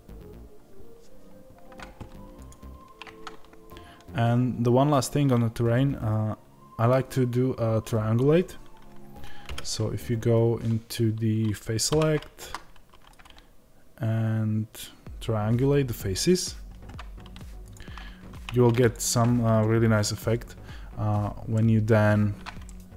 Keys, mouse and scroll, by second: 2.4 click, 17.6 click, 21.4 middle click, 22.0-22.5 scroll up 2, 22.5 shift+middle click.